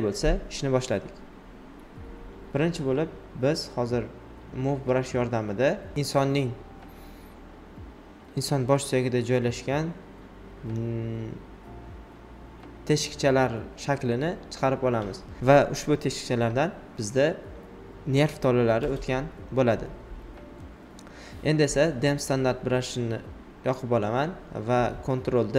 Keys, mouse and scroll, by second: 0.0-1.6 typing, 2.6 alt+click, 3.8-5.1 shift+drag, 5.1 alt+right click, 5.8 alt+right click, 8.0 alt+click, 8.6 right click, 9.8 alt+right click, 11.5-12.9 alt+drag, 12.9 alt+click, 13.8 shift+click, 15.5 ctrl+click, 16.7 space, 16.8 click, 17.4 shift+click, 18.9 alt+right click, 22.1 alt+right click, 24.0 alt+right click, 24.9-25.5 typing.